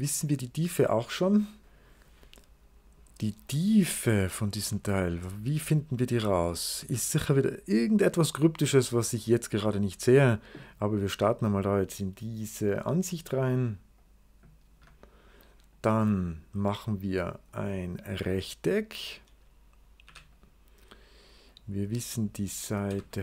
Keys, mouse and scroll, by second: 1.5 click, 10.9 scroll up 2, 11.9 scroll up 2, 12.6 click, 13.4 click, 13.8 click, 15.2 right click, 15.8-16.6 scroll down 2, 16.0 right click, 16.6 right click, 19.5 scroll up 2, 19.9 r, 20.2 click, 21.3 click, 21.9 click, 22.7 d.